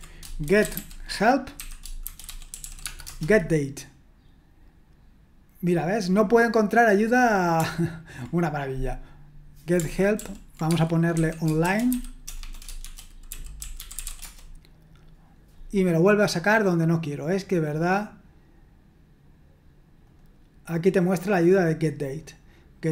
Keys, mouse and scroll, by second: 0.2-3.1 typing, 10.2 ctrl+p, 10.6-14.5 typing, 16.4-18.5 drag, 20.1 click, 21.0-22.9 scroll down 1.